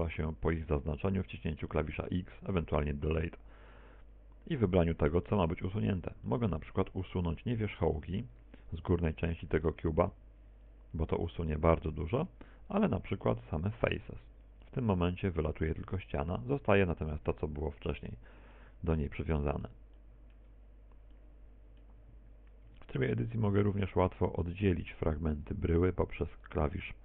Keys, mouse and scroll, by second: 1.5 right click, 2.2 shift+right click, 3.4 x, 7.3 middle click, 8.3 middle click, 9.3 right click, 9.8 shift+right click, 10.4 right click, 10.8 right click, 12.0 x, 14.0 ctrl+z, 15.0 x, 19.9 middle click, 20.8-21.4 scroll up 3, 21.4 shift+middle click, 22.0 shift+middle click, 22.6 scroll down 3, 23.2 middle click, 24.0 Tab, 24.7 Tab, 25.6 right click, 26.4 shift+right click.